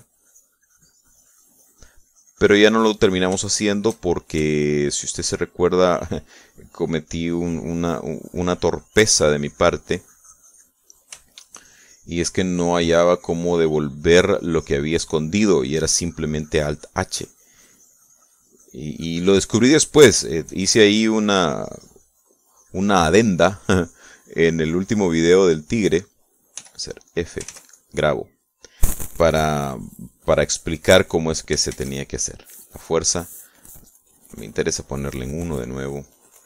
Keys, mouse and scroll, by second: 4.1 middle click, 5.2 shift+click, 5.8 shift+click, 6.7 shift+click, 7.3-12.5 shift+drag, 12.1 middle click, 12.7-20.2 shift+drag, 20.4 click, 21.9-27.6 shift+drag, 27.8 f, 28.4 click, 28.8 ctrl+s, 33.0 shift+f, 35.5 click.